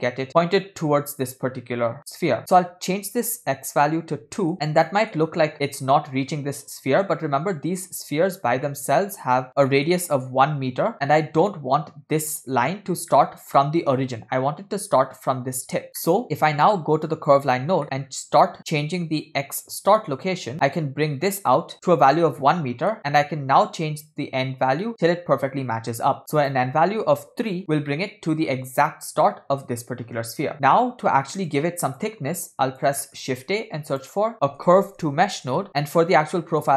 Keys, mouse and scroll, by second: 1.2-2.4 scroll up 2, 2.4-4.5 drag, 4.9 shift+middle click, 5.2-5.9 scroll up 1, 5.9-6.5 scroll up 1, 8.4-8.7 scroll down 2, 8.7-9.3 middle drag, 9.7-10.9 scroll up 4, 9.7 middle click, 13.2-13.6 middle drag, 15.9-16.2 scroll down 3, 16.0-16.7 middle drag, 17.4 click, 17.8 middle click, 18.1-19.2 scroll up 2, 19.3-21.7 drag, 22.9 scroll down 3, 22.9 middle click, 23.0-23.6 scroll up 1, 23.6 scroll up 1, 23.7-27.6 drag, 27.9-28.5 middle drag, 30.5-31.5 scroll down 8, 31.6-32.1 drag, 32.4 click, 33.0 middle click, 33.6 shift+a, 36.0-36.7 scroll up 4, 36.4 middle click.